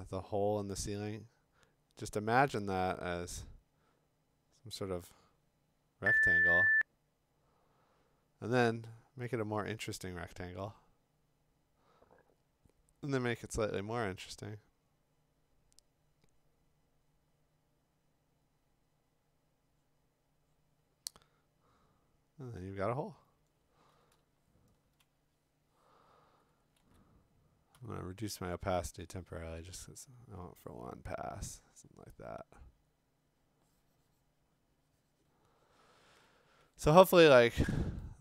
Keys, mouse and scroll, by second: 24.0-25.0 ], 26.8 ctrl+z, 27.7 5, 37.8-38.2 click.